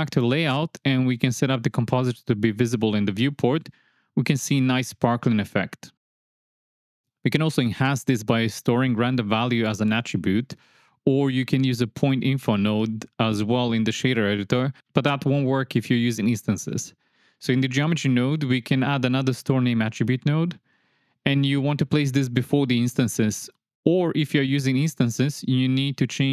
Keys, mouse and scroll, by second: 3.5-4.5 drag, 5.1-14.3 middle drag, 14.9 click, 16.7 middle click, 18.4 shift+a, 24.1 click, 25.1 click.